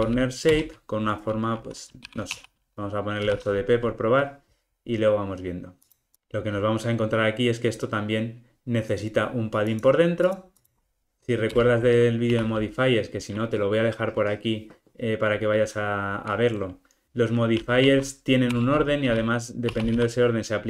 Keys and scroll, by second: 0.6 Return, 18.6 Return.